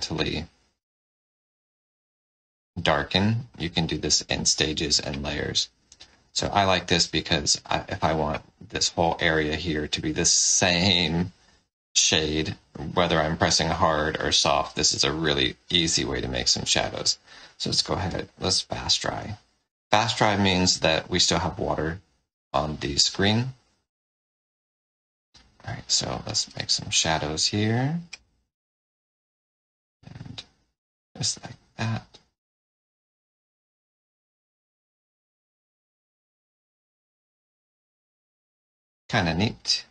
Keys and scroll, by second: 5.4 space, 20.4-21.3 typing.